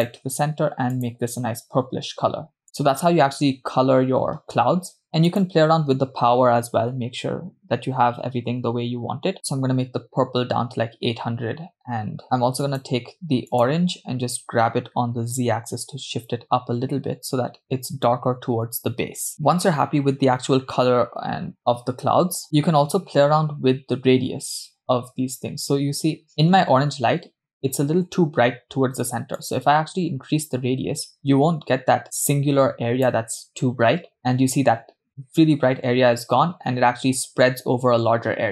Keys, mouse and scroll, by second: 1.6 click, 5.3-9.3 drag, 9.3 0, 12.6-13.2 drag, 14.2 click, 15.5 g, 29.4-33.9 drag.